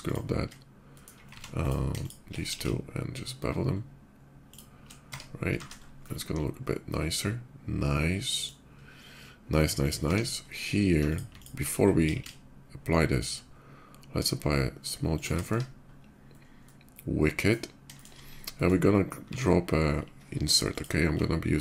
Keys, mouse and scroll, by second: 0.6 shift+middle click, 1.1 ctrl+z, 1.4 click, 1.7 shift+click, 2.1 ctrl+b, 2.7 ctrl+shift+b, 4.3 shift+click, 4.8 Tab, 5.5-8.2 shift+middle drag, 7.8 shift+2, 8.4-9.0 middle drag, 9.4 click, 9.9 Tab, 10.1 middle click, 10.7 alt+click, 11.1 alt+click, 11.6 ctrl+b, 12.2 ctrl+shift+b, 13.3 middle click, 14.9 shift+click, 15.1 Tab, 15.5 middle click, 16.0 middle click, 16.2-17.2 middle drag, 17.7 shift+middle click, 18.0 scroll down 2, 18.3 shift+middle click, 18.9 q, 20.5 alt+click, 21.4 alt+click.